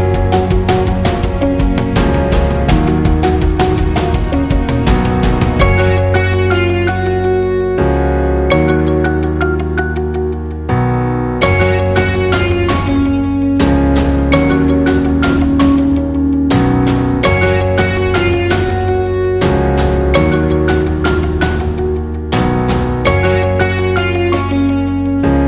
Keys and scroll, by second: 1.6-2.4 space, 15.2 ctrl+z, 22.1 Left.